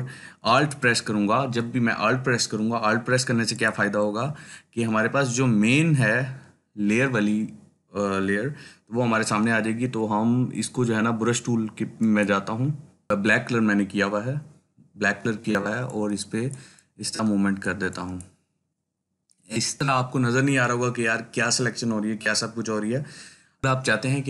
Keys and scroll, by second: 13.1 ], 13.2 ].